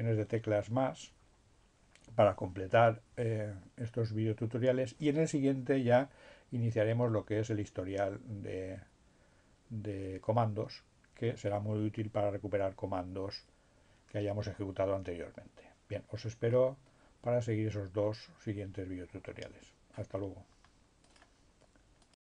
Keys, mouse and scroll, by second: 21.1 click, 22.2 click.